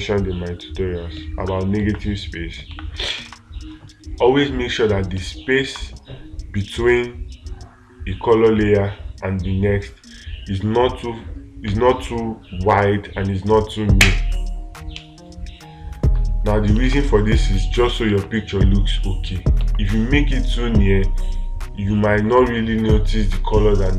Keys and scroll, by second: 2.2 space, 3.7 space, 17.3 space.